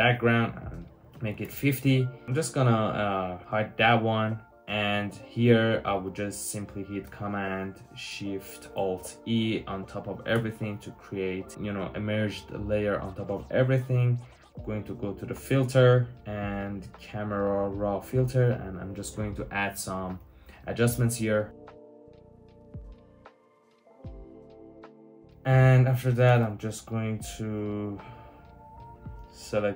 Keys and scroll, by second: 1.0 typing, 1.2 Return, 10.2 alt+shift+super+e, 26.3 w.